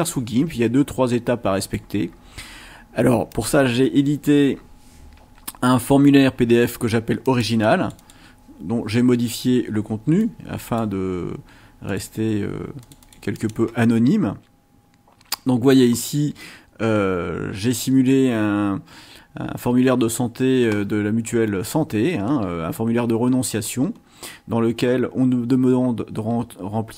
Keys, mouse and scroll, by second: 0.1-1.9 drag, 7.6 click, 10.2 click, 11.9 click, 12.8 click, 15.9 scroll up 2, 23.2-24.1 scroll down 4, 24.8 scroll up 2.